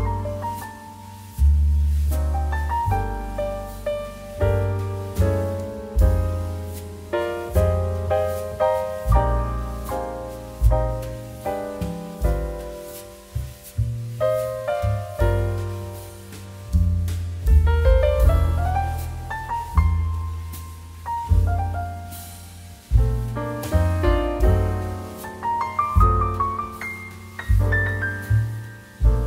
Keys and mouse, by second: 0.2 shift+middle click, 1.2 click, 1.3 middle click, 1.6 shift+a, 2.6 click, 4.9 middle click, 5.2 shift+middle click, 6.3 click, 7.4 middle click, 7.6 shift+middle click, 7.9 middle click, 8.3 shift+middle click, 10.0 middle click, 11.0 click, 14.2 middle click, 16.3 g, 16.9 shift+z, 17.3 click, 17.4 r, 18.7 9, 18.8 0, 18.9 Return, 19.7 r, 20.5 click, 20.6 middle click, 20.9 shift+middle click, 21.0 middle click, 21.9 shift+middle click, 22.1 middle click, 22.3 g, 22.6 shift+z, 22.8 click, 23.0 s, 23.6 click, 23.7 middle click, 23.9 shift+middle click, 24.1 middle click, 24.4 r, 25.5 click, 25.7 g, 25.9 shift+z, 26.6 click, 26.7 middle click.